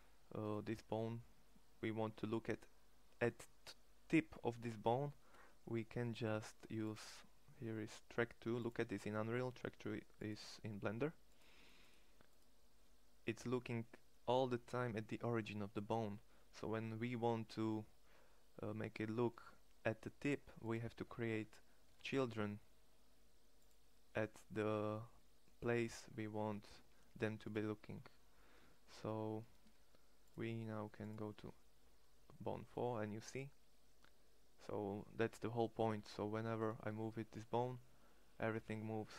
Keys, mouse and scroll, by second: 20.7 Tab, 21.4 e, 26.2 alt+p, 28.1 Tab, 36.4 r, 37.8 drag, 38.1-38.5 right drag.